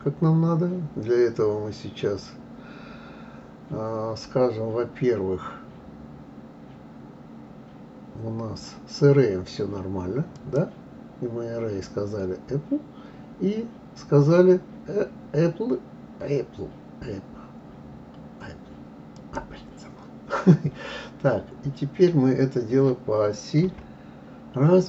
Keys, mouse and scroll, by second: 10.3 click, 19.1-19.8 drag, 23.6 KP_3.